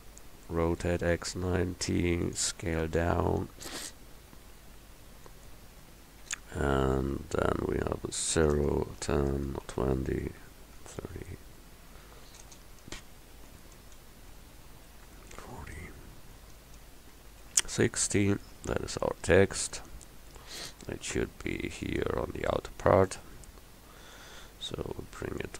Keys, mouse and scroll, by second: 0.8 r, 2.7 s, 5.8 Tab, 6.6 BackSpace, 6.8 BackSpace, 7.0 BackSpace, 7.2 BackSpace, 8.4-11.0 typing, 12.4-17.6 typing, 18.5 Tab, 21.7 click, 24.2-25.5 drag.